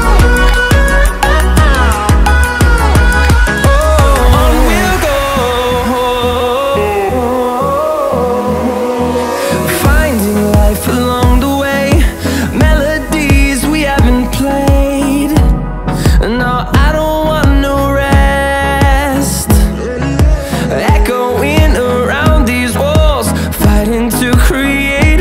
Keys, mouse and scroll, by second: 2.1 click, 5.0 click, 8.3 F8, 8.9 middle click, 10.3 shift+middle click, 11.8 Tab, 12.7 middle click, 23.6 F8, 23.9 click, 24.5 right click, 24.8 click.